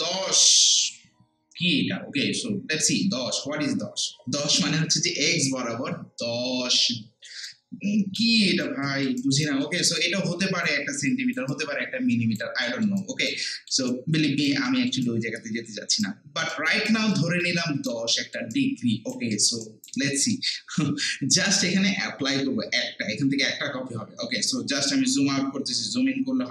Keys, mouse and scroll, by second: 6.8 scroll down 1, 7.5 alt+click, 8.4 right click, 8.8 alt+middle click, 9.2 alt+right click, 9.6 alt+middle click, 10.0 alt+right click, 11.1 alt+click, 11.5 alt+right click, 12.6 alt+middle click, 13.0 alt+right click, 13.4 alt+middle click, 13.9 alt+right click, 14.7 alt+middle click, 15.0-17.1 alt+right drag, 17.1 alt+click, 17.6 alt+right click, 18.1 alt+middle click, 18.5 alt+right click, 19.3 alt+middle click, 19.6 alt+right click, 20.4 alt+middle click, 24.4 scroll down 1, 25.6 scroll up 1.